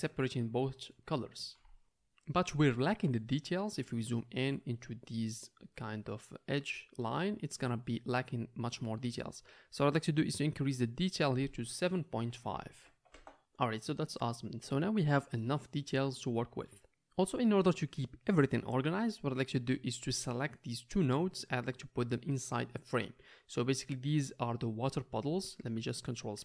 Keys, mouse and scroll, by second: 4.2-7.4 middle drag, 7.8 middle drag, 15.5-22.3 middle drag, 19.4-22.3 drag, 19.4-25.3 right drag, 22.8-25.3 drag, 22.8-26.4 middle drag.